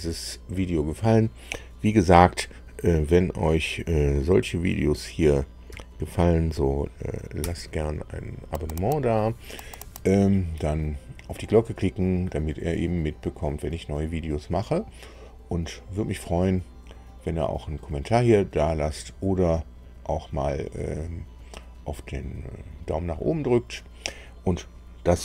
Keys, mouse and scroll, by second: 7.3 super+u.